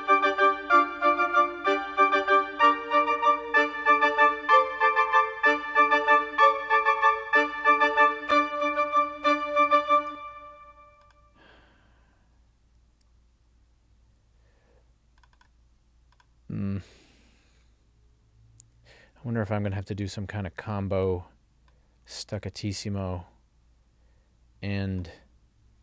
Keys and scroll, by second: 10.1 space.